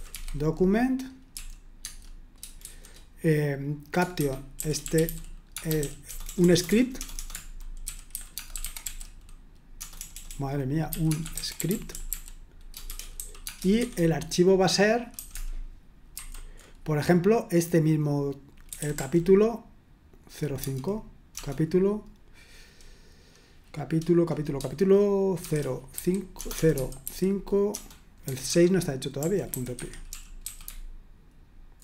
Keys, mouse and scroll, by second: 0.0-1.4 typing, 1.8 Tab, 2.7 typing, 4.0-13.8 typing, 15.2-16.2 typing, 18.5-19.4 typing, 20.6 space, 25.4-31.8 typing, 29.7 Escape.